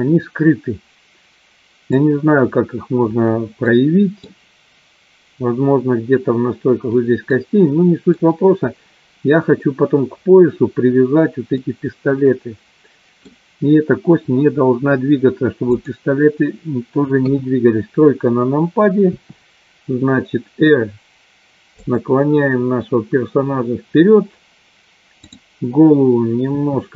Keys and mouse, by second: 3.7 middle click, 7.3 middle click, 11.7-13.3 middle drag, 15.7 click, 17.2 KP_3, 19.3 r, 26.7 r.